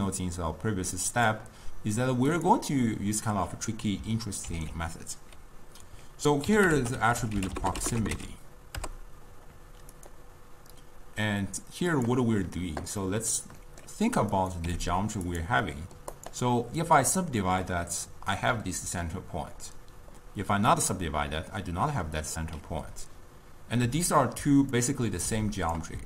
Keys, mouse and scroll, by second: 4.5 ctrl+a, 6.8 t, 12.0 click, 13.1-14.5 middle drag, 14.5 click, 14.8 g, 15.8-16.3 middle drag, 16.3 click, 17.0-18.2 drag, 20.8-23.8 drag, 24.9 drag.